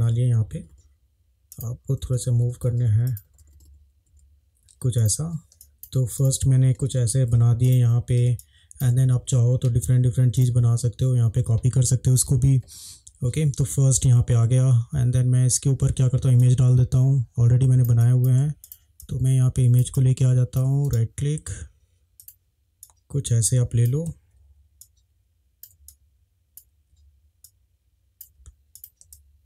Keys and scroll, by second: 0.0 Up, 0.3 Up, 0.4 Up, 0.6 Up, 0.8 Up, 2.0 Up, 2.2 Up, 2.3 Up, 2.5 Up, 2.6 Up, 2.7 Up, 2.9 Up, 3.3 Up, 3.5 Up, 4.0 Up, 5.5 space, 6.8 Up, 8.2 space, 16.3 space, 29.1 space.